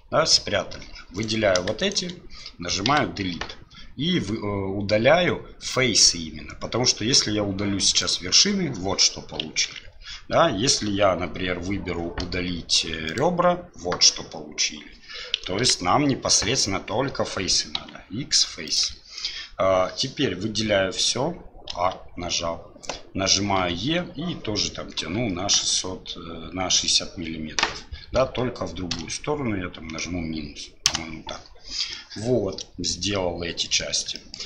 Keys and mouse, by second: 1.2 click, 2.9 Delete, 9.7 ctrl+z, 11.4 x, 15.6 ctrl+z, 17.8 x, 19.2 click, 32.1-33.8 middle drag, 34.2 shift+middle click.